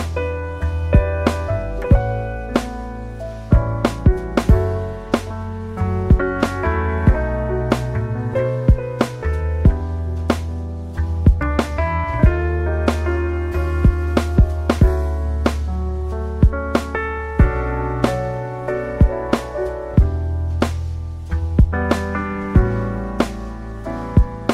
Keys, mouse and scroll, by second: 0.1 space, 0.5 click, 1.5 click, 5.1 click, 5.3-6.4 drag, 6.9-10.3 scroll down 3, 8.3 middle click, 8.6 middle click, 9.1 middle click, 9.3-10.7 middle drag, 10.3-11.7 scroll up 3, 12.5 middle click, 12.5-13.3 scroll down 2, 14.0-15.1 scroll down 3, 19.7 click.